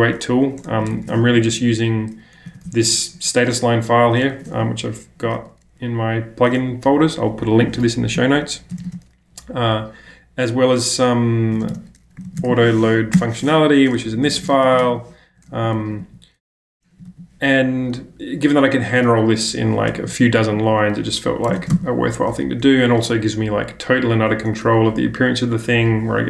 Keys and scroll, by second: 0.7-2.8 typing, 4.5 -, 8.7 space, 8.8 space, 11.5-15.8 typing, 13.1 Return, 19.9-21.5 typing, 21.6 ctrl+space, 21.7 ctrl+l.